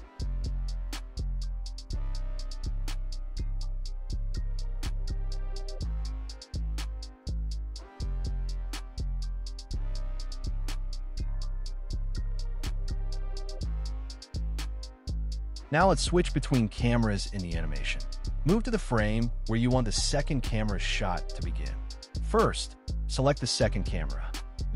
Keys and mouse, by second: 1.5-2.6 drag, 3.5-6.5 drag, 7.0-8.6 drag, 8.8 i, 9.9 drag, 11.1 click, 11.5 s, 11.6 x, 15.4 middle click, 16.3-16.7 middle drag, 17.1 click, 20.0 click, 21.1-21.8 drag.